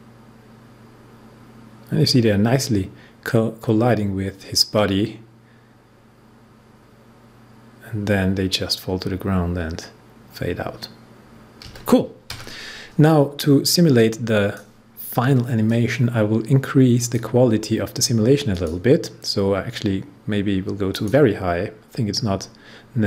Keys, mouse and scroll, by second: 12.8-18.5 drag, 20.8 click.